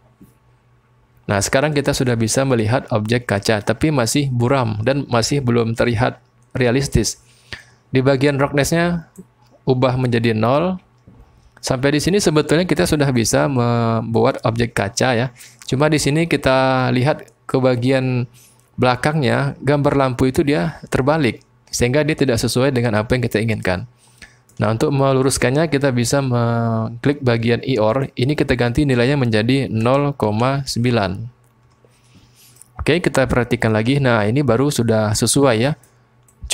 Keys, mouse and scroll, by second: 1.7 middle click, 2.2 click, 3.1 middle click, 9.2-10.6 drag, 13.1 click, 15.9 click, 21.8-24.5 drag, 27.9-31.7 drag, 32.6-33.8 drag, 32.8-33.8 middle drag, 35.1 click, 35.1 middle click, 36.3-36.5 drag.